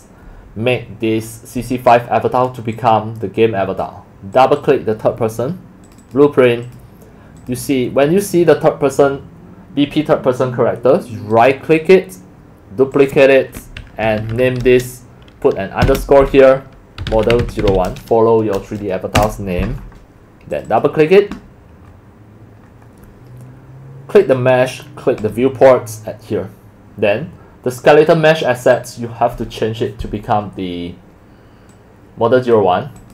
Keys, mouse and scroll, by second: 2.8-3.8 drag, 4.1 click, 6.0 click, 6.3 click, 6.7 click, 7.4 click, 11.3 click, 11.9 right drag, 12.9 click, 14.0 Right, 14.2 Right, 14.3 Right, 14.7 BackSpace, 16.8-18.2 typing, 19.2 Return, 20.5 click, 20.7 click, 22.8-23.2 drag, 24.2 click, 24.5 click, 25.2 scroll up 2, 26.5 scroll up 2, 27.0 scroll up 2, 31.7-32.5 drag, 33.0 click.